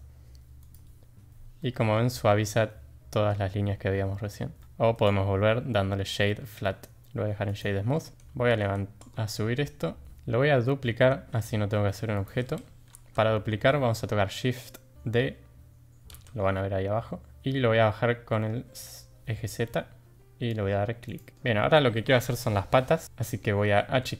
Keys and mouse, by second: 1.6-1.9 middle drag, 4.6 middle click, 5.1-7.6 right drag, 8.4 g, 11.1 shift+d, 12.6 ctrl+z, 16.1 shift+d, 21.3 click, 23.0 middle drag, 24.0 s.